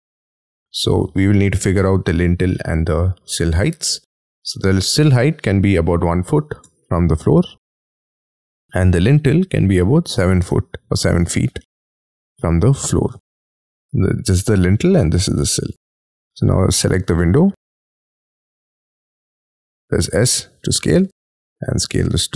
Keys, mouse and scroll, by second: 1.4 space, 1.5 y, 2.0 scroll down 6, 2.5 middle click, 3.3 scroll down 7, 3.6 scroll up 6, 3.9 t, 5.9 1, 6.3 ', 6.6 Return, 9.7 7, 10.1 ', 10.3 Return, 11.6 middle click, 13.1 space, 16.1 scroll up 5, 16.8 s, 17.8 middle click, 20.1-20.5 scroll down 5.